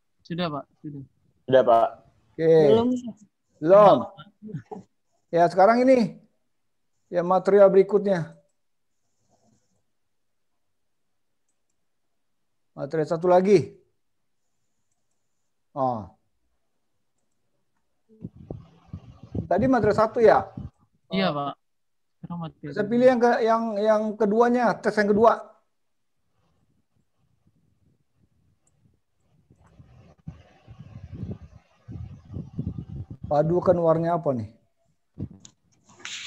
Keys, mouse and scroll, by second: 1.1 click, 11.9 click, 21.1 click, 27.0 click.